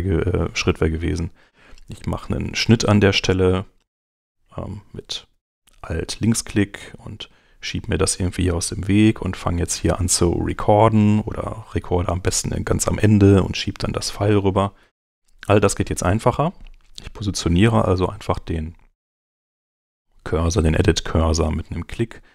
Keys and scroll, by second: 14.8 super+z.